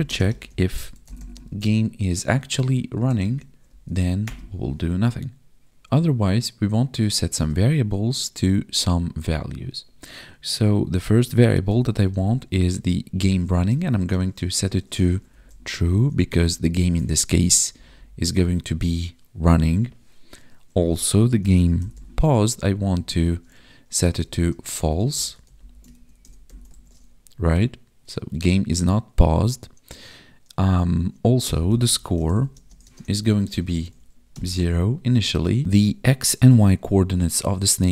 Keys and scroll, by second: 0.0 space, 2.2 Tab, 2.9 Right, 5.7 ctrl+Right, 5.8 Down, 13.2 Tab, 13.4 space, 13.9 space, 17.6 ctrl+Down, 22.8 Down, 23.2 Tab, 24.0 space, 24.3 space, 25.9 ctrl+s, 26.6 ctrl+s, 32.5 space, 32.8 space, 33.8 ctrl+s.